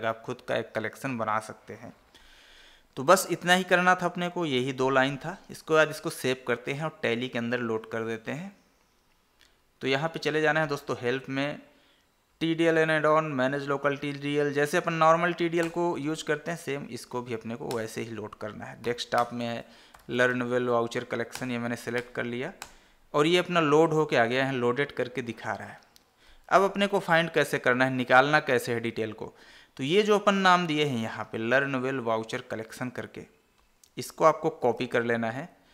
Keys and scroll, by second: 5.8 ctrl+s, 10.1 Escape, 16.8 Up, 17.4 Down, 19.2 Down, 25.5 Escape, 29.5 alt+Tab, 35.0 ctrl+c.